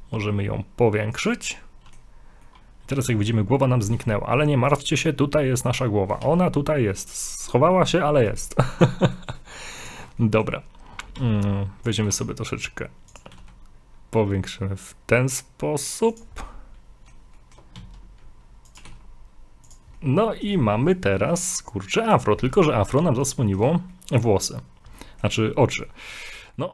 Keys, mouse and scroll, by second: 1.5 middle click, 2.4 middle click, 3.2-3.8 scroll up 1, 4.7 click, 6.2 g, 8.9 middle click, 9.8 click, 10.2 middle click, 11.2 s, 12.0 g, 13.2 g, 16.4 middle click, 17.4 shift+middle click, 17.8 s, 18.8 g, 20.0 middle click, 22.7 middle click, 22.7 scroll up 1, 23.4 shift+middle click, 25.0 middle click, 25.9 middle click, 26.3 scroll down 3.